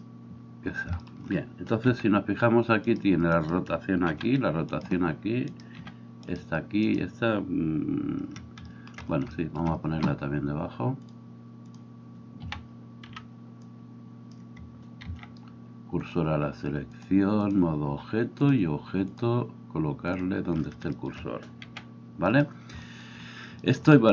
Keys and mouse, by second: 1.9 r, 4.1 r, 5.8 r, 12.5 a, 13.1 b, 15.2 shift+s, 21.8 r.